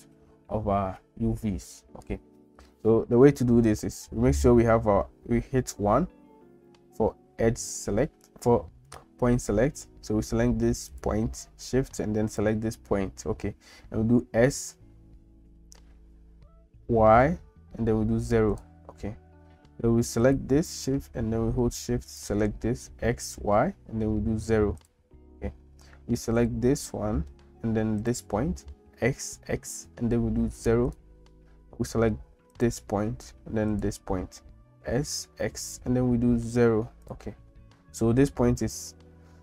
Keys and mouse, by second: 5.7 1, 10.9 click, 14.3 s, 20.2 click, 22.1 shift+click, 22.9 s, 26.4 click, 28.0 shift+click, 28.9 s, 32.5 click, 33.7 shift+click, 34.9 s.